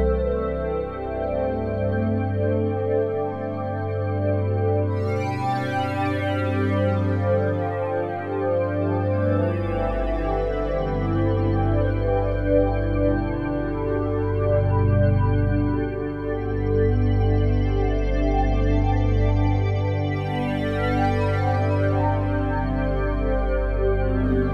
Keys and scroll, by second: 0.3 Delete, 7.2 s.